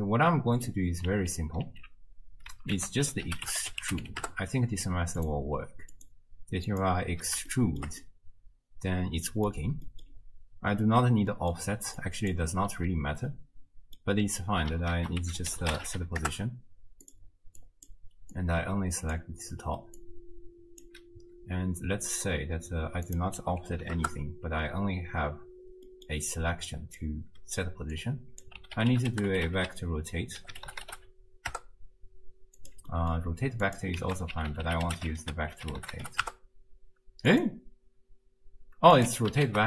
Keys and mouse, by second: 1.1 alt+q, 1.7 alt+q, 2.8 ctrl+a, 6.0-7.0 drag, 7.6 shift+drag, 8.2-9.5 drag, 9.9 click, 11.5 drag, 12.1 click, 13.4 click, 15.0 ctrl+a, 17.7 click, 18.4-19.2 drag, 19.7 click, 20.2 click, 23.1 click, 25.9 click, 26.8 click, 28.0-32.7 drag, 32.9 click, 33.7 click, 34.1 ctrl+a, 39.0 click, 39.1 x, 39.5 ctrl+a.